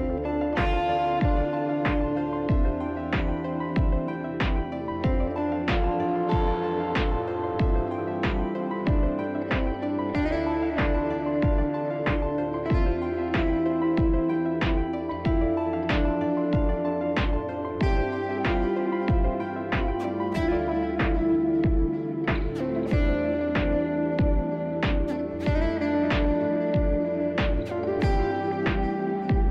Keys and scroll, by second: 0.0 ctrl+z, 7.7 ctrl+z, 8.8 ctrl+z, 10.1 ctrl+z, 11.9 ctrl+z, 14.6 ctrl+z, 19.6 F3, 19.7 F3, 19.8 ctrl+z, 22.3 ctrl+z, 28.8 ctrl+z.